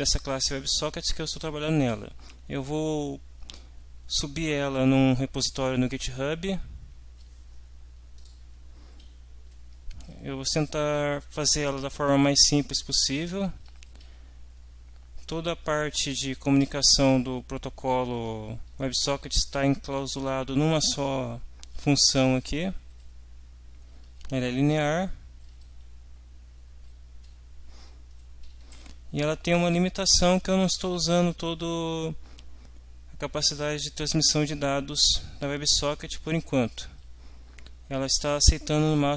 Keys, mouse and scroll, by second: 1.8 click, 8.2 click, 9.5 Down, 13.7 Down, 14.0 Up, 16.1 Home, 16.6 Up, 17.4 Down, 20.7 Down, 36.7 Down, 37.2 Up.